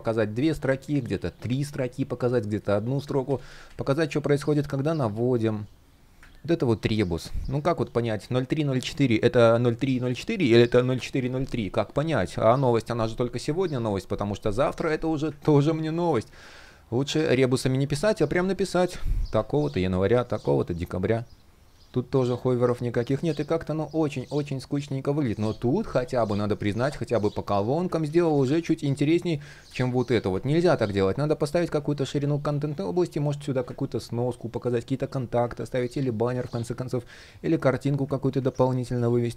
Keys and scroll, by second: 2.9 super+z, 15.1 super+z, 27.7 super+z, 35.3 super+z, 38.0 super+z.